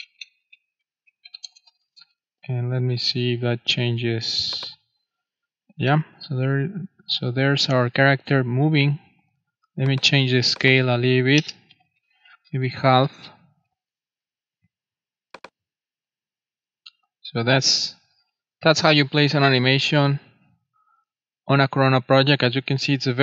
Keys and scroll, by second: 0.0-1.9 typing, 11.3-12.7 typing, 12.8 super+5, 13.0 super+s.